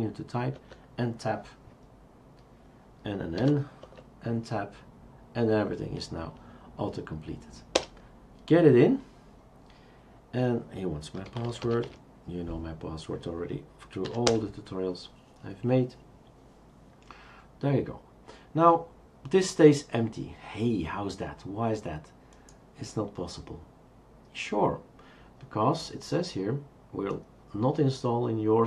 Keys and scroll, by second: 0.5 Tab, 3.4 typing, 3.8 Tab, 7.7 Return, 11.0-12.1 typing, 14.1 typing, 14.3 Return.